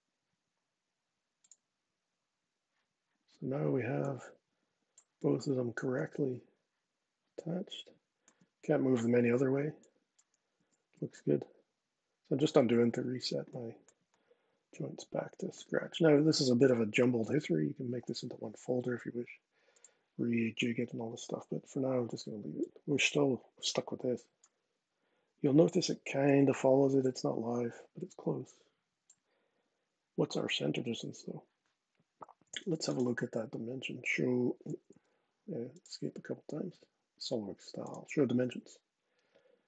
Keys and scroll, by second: 4.9 super+z, 10.3 super+z, 34.4 Escape, 34.6 Escape.